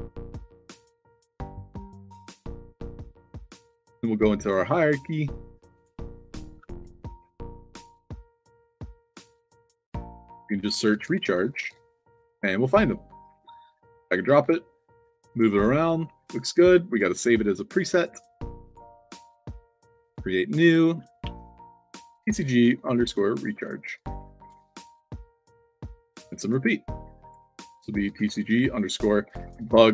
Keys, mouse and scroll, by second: 0.3 click, 0.6 ctrl+v, 1.1 space, 1.5 shift+p, 2.7 click, 4.3 click, 7.1 c, 10.6-11.8 typing, 12.8 click, 13.4 click, 14.1 click, 14.3 f, 15.0-15.5 drag, 16.0 ctrl+z, 17.7 click, 18.6 click, 19.4 click, 20.4 click, 22.0-26.5 typing, 26.4 click, 27.2 click, 28.1 shift+c, 29.4-29.9 typing.